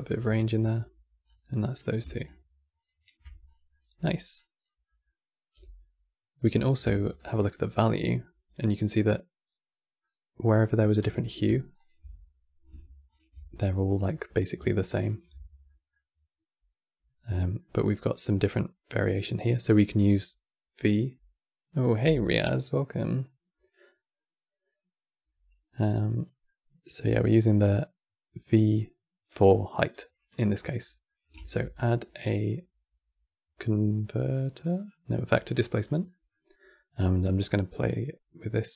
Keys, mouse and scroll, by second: 0.9 scroll down 3, 1.2-2.0 middle drag, 2.5 ctrl+shift+click, 3.1 scroll down 3, 3.4-4.0 middle drag, 4.0 click, 4.6 middle click, 5.2 g, 7.0 ctrl+shift+click, 7.3 ctrl+shift+click, 8.3-11.5 middle drag, 11.5 ctrl+shift+click, 12.9 ctrl+shift+click, 13.3-14.5 middle drag, 14.5 ctrl+shift+click, 14.7 ctrl+shift+click, 15.4-20.3 middle drag, 25.5-26.1 scroll down 2, 26.1-29.2 middle drag, 29.4 middle click, 30.3 scroll up 3, 30.5 middle click, 31.1 shift+a, 35.8-37.1 middle drag, 37.1 click.